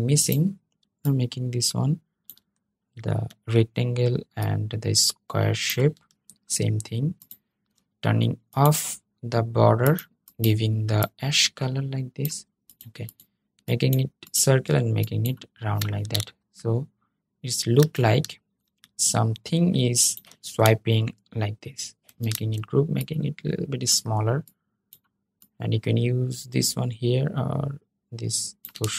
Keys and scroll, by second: 21.8 super+g.